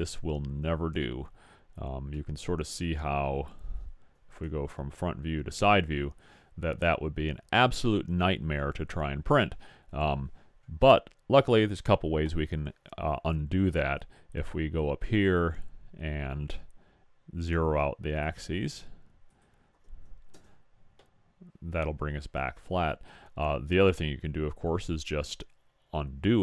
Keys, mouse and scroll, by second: 2.4 middle drag, 2.7 middle drag, 3.1 middle click, 4.3 KP_1, 4.9 KP_3, 15.3-17.1 drag, 19.4-21.1 drag, 22.8-24.6 middle drag.